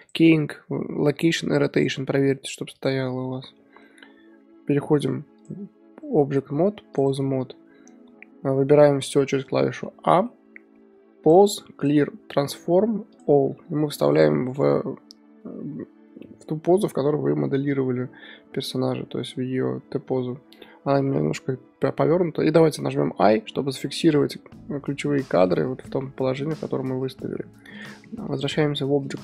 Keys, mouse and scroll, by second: 6.9-9.2 drag, 9.2 a, 9.8-13.2 middle drag, 13.2-13.6 drag, 13.6-19.3 middle drag, 16.2-23.2 drag, 20.6-21.0 middle drag, 21.0 KP_7, 23.2 i, 23.7-28.4 middle drag, 28.4-29.2 drag.